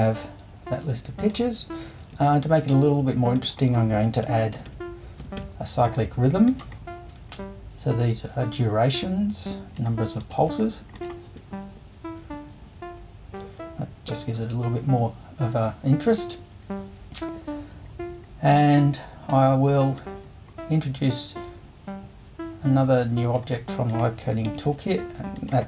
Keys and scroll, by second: 2.1 super+2, 4.2-5.4 typing, 24.5 super+i.